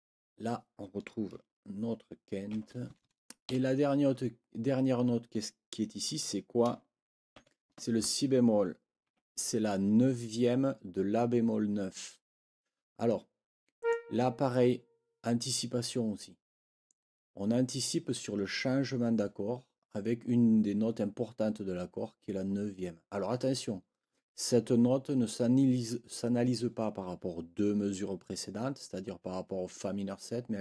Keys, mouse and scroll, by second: 2.5 shift+9, 3.5 Right, 9.0 Escape, 13.8 click.